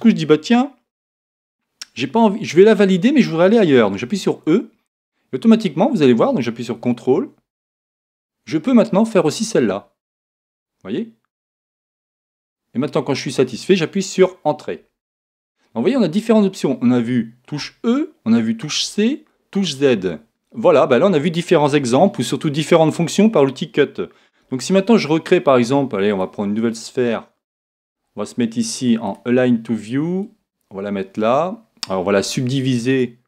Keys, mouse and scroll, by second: 20.3-24.1 middle drag, 24.7 shift+a, 29.1 click, 32.2 w.